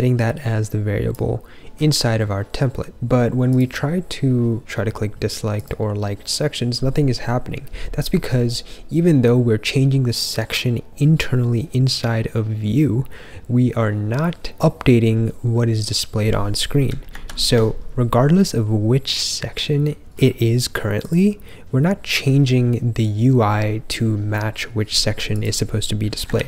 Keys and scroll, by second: 26.3 ctrl+f.